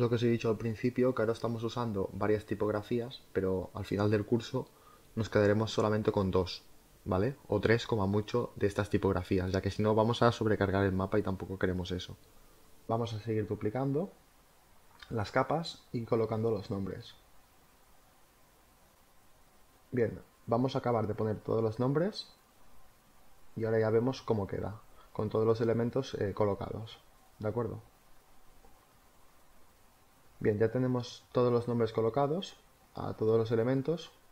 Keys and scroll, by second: 0.0-2.0 typing, 6.2 space, 11.5 space, 13.8 space, 16.7 space, 21.8 z, 23.1 space, 23.3 z, 25.5 z, 28.7 space, 32.7 space.